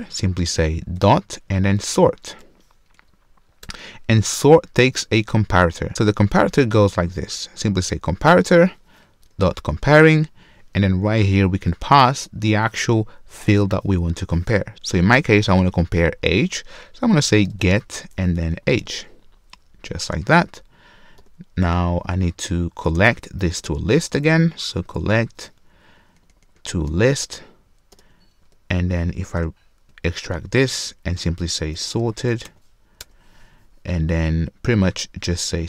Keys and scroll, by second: 3.6 Return, 18.8 Return, 26.9 Return, 28.4 super+w, 29.4 alt+super+v.